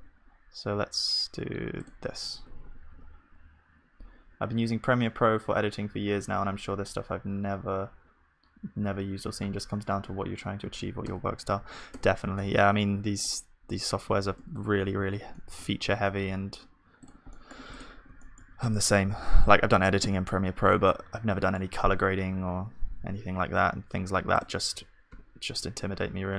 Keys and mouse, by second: 2.4 Tab, 2.9 ctrl+s, 11.1 Tab, 11.6 ctrl+s, 11.9 Tab, 12.4-22.3 middle drag, 14.5 Tab, 17.3-20.7 drag, 17.3-20.7 right drag, 22.3 e.